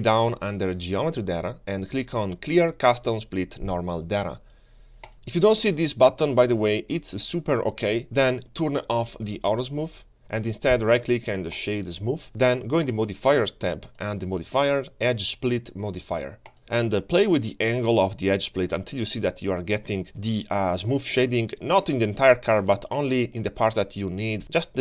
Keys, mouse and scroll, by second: 3.3-4.4 scroll down 2, 5.1 click, 10.0 click, 10.8 right click, 12.9 click, 13.9-16.6 drag, 16.7-18.5 drag, 19.2-19.8 scroll up 7, 19.8 middle click, 20.2 scroll up 1, 20.2 ctrl+shift+middle click, 20.7-21.2 scroll up 1, 21.2-22.6 drag, 23.2-24.8 shift+drag.